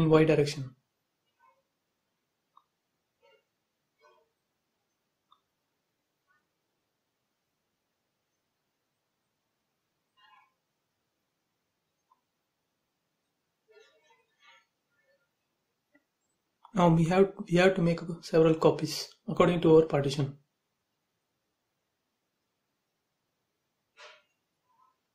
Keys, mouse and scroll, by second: 0.0-2.3 middle drag, 2.3 m, 2.8 space, 3.0 scroll up 1, 3.3 middle click, 4.1 scroll up 1, 5.7 m, 8.3 scroll up 1, 9.2 click, 9.7-10.3 scroll down 1, 10.3-11.0 scroll down 1, 11.8 click, 11.9 space, 12.1-12.4 scroll down 1, 12.7-15.2 shift+middle drag, 15.2 m, 16.4 ctrl+click, 19.3 click, 19.4 space, 19.6-19.9 scroll down 1, 20.0 shift+middle click, 20.9-21.5 scroll up 1, 21.5 click, 22.4 m, 23.3 ctrl+click.